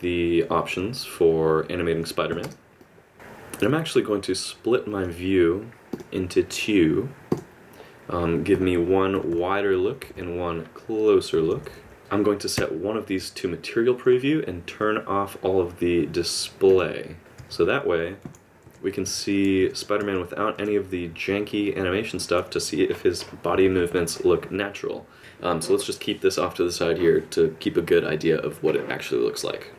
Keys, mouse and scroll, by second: 2.4 space, 2.8 click, 3.1 middle click, 4.9 right click, 9.1 KP_Subtract, 9.3 KP_Subtract, 9.6 KP_Add, 10.0 KP_Add, 10.1-11.5 KP_Add, 11.7 KP_Add, 12.0 KP_Subtract, 12.5 z, 17.1 click, 17.4-20.5 typing, 21.6 click, 23.5 KP_Add, 23.6 KP_Add.